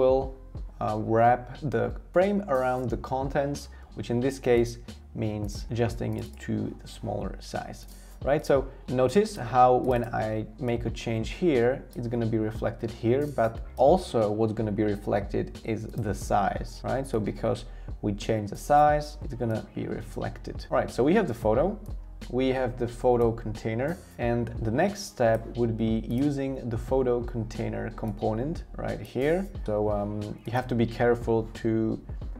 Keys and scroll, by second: 3.7 v.